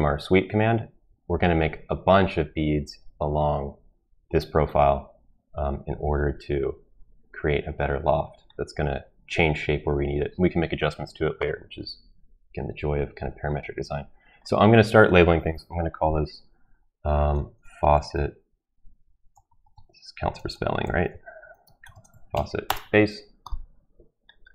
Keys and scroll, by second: 16.9-22.8 typing.